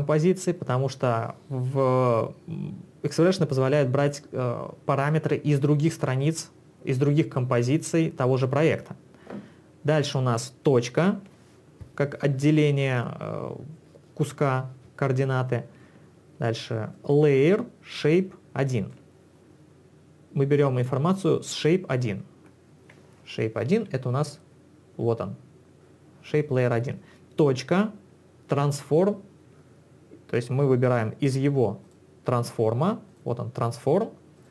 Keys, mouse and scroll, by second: 16.9 ctrl+click, 23.8 Escape, 31.3 click, 31.9 click, 33.1 click, 34.4 click.